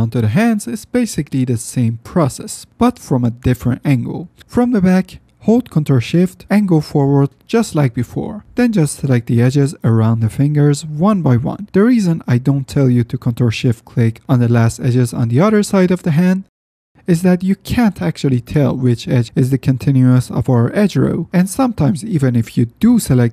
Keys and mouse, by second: 1.5 middle click, 2.5 middle click, 3.7-4.2 middle drag, 5.3 F9, 6.4-6.8 drag, 8.2-8.6 middle drag, 10.0-10.4 middle drag, 11.6-12.4 middle drag, 12.4 ctrl+z, 16.8 click, 17.1 ctrl+z, 17.7 shift+drag, 19.3-19.7 middle drag, 20.2-20.6 middle drag, 21.2 shift+middle drag, 21.5 middle click, 21.8 shift+middle drag, 22.0 middle drag, 22.5 ctrl+shift+click, 22.7 shift+middle click, 22.9 shift+click, 23.2 ctrl+shift+z.